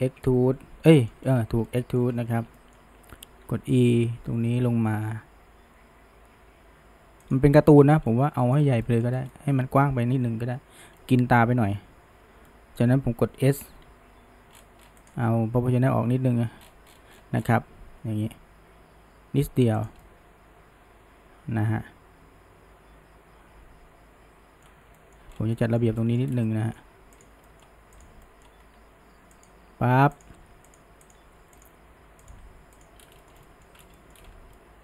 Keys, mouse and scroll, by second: 0.1 ctrl+KP_3, 0.9-1.3 shift+middle drag, 1.3-1.7 scroll up 1, 1.7-2.1 shift+middle drag, 2.1-2.6 scroll up 1, 2.6 shift+middle click, 3.3 e, 7.6 scroll, 7.8-8.6 shift+middle drag, 8.6 scroll, 8.8 shift+middle drag, 9.2 scroll, 9.3-13.9 middle drag, 13.9 s, 16.1 s, 20.0-23.1 middle drag, 25.0-25.3 shift+middle drag, 25.6-26.3 middle drag, 26.5-27.2 middle drag, 27.2 click, 27.5-28.0 middle drag, 28.0 click, 28.3 middle click, 28.8 g, 30.2 click, 30.4 g, 31.1 click, 31.3 g, 32.3 click, 32.4 g, 33.2-33.8 shift+middle drag, 34.0 shift+middle drag, 34.6-34.8 middle drag.